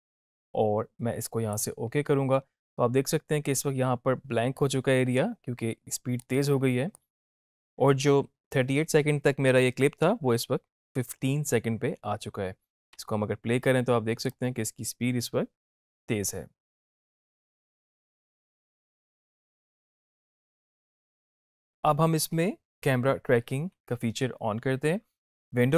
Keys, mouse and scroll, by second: 1.4 click, 6.2-7.0 click, 12.9 space, 21.3 space.